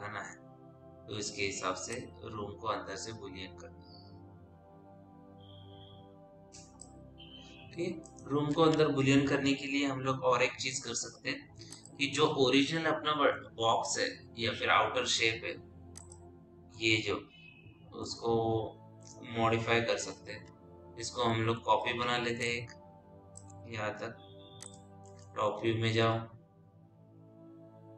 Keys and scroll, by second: 14.6 p, 21.6 w, 26.4 t.